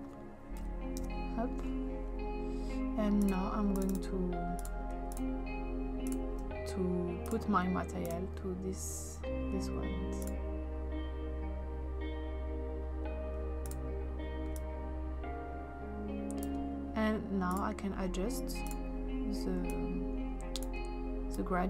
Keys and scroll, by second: 0.6 0, 1.0 Return.